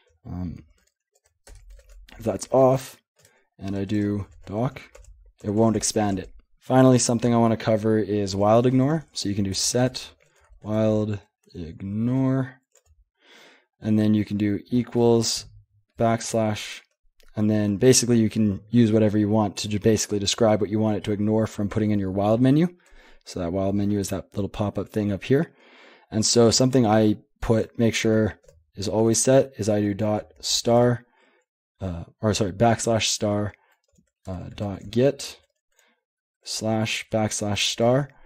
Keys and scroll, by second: 0.5 alt+b, 0.8-4.8 typing, 2.7 ctrl+p, 5.0 Tab, 5.5 Tab, 5.6 Tab, 5.8 Tab, 8.8-13.3 typing, 14.7 typing, 16.0 typing, 17.4 typing, 29.0 \, 33.9-35.3 typing, 36.4-38.1 typing.